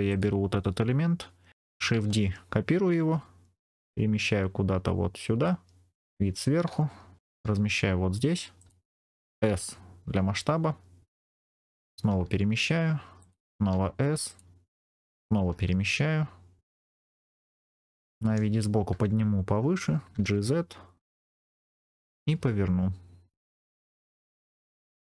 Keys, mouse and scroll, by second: 0.0 click, 1.9 shift+d, 5.8 click, 5.9 KP_7, 7.3 g, 8.5 click, 9.2 s, 11.3 click, 12.0 g, 13.1 click, 13.6 s, 14.2 click, 15.4 g, 17.4 click, 18.0 KP_1, 20.0 g, 20.1 z, 21.1 click, 21.2 scroll up 2, 21.9 scroll up 2, 22.2 r, 23.2 click, 23.8 g, 24.6 click, 24.7 r.